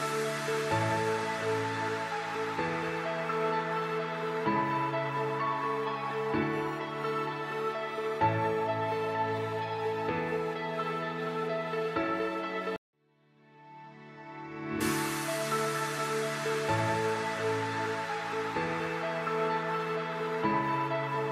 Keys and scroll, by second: 1.5 shift+F2, 3.9 Delete, 15.8 F4, 18.0 shift+F2, 18.9 F3.